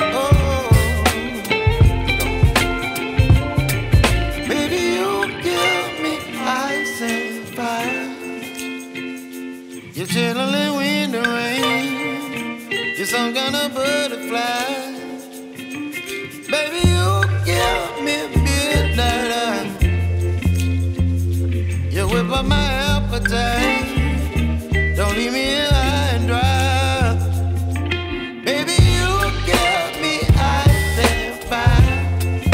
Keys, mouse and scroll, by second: 4.0-6.3 drag, 6.3 ctrl+z, 7.3 ctrl+z, 8.0 ctrl+s, 9.3-19.7 drag, 19.7 ctrl+s, 21.1-23.5 drag, 24.4 click, 25.7 click, 27.7 click, 29.1 click, 29.6 scroll down 3, 30.8-32.5 drag.